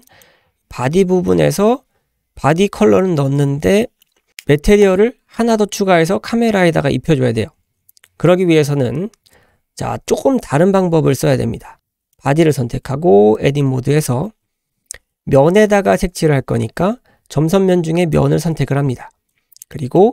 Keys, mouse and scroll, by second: 0.1 click, 3.5 scroll up 1, 3.8 shift+middle drag, 4.1 scroll up 2, 12.1 click, 13.4 Tab, 15.9-16.4 scroll up 2, 18.0 click, 19.2-19.6 scroll up 2, 19.7 shift+middle click.